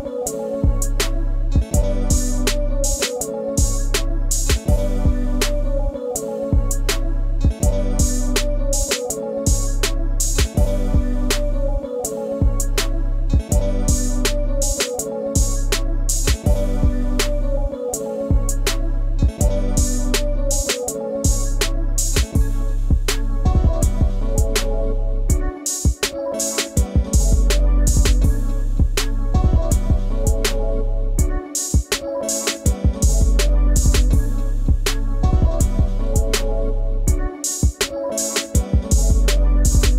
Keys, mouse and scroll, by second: 0.0-1.1 drag, 2.9 click, 5.1 click, 5.7-7.4 middle drag, 7.4 click, 8.4-10.4 middle drag, 10.4-13.1 drag, 13.1-14.7 middle drag, 14.7 Tab, 15.0-15.6 middle drag, 15.6 click, 16.0-16.7 middle drag, 16.7 Tab, 17.2-18.7 ctrl+middle drag, 18.7 click, 20.0 click, 22.3-24.7 middle drag, 24.7 click, 25.2 middle click, 26.2 g, 28.4-30.5 middle drag, 30.5 click, 33.7 click, 35.0 middle click, 35.9 click, 38.2 click, 39.0 e.